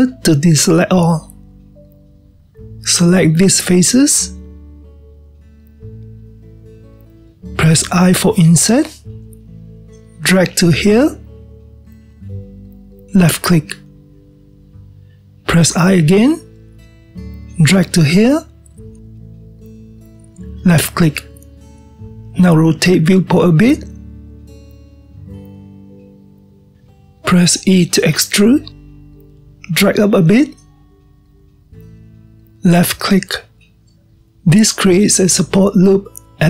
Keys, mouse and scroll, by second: 0.9 click, 2.5-4.0 scroll up 1, 4.0 click, 6.2-8.2 scroll up 2, 8.2-9.5 scroll up 1, 14.4-16.3 scroll up 1, 22.1-26.6 middle drag, 27.9 e, 33.4-36.4 middle drag.